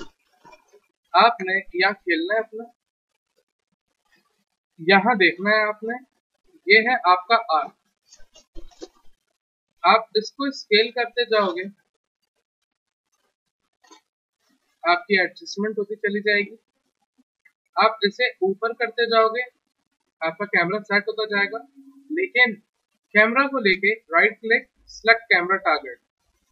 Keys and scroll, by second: 10.0 r, 16.3 w.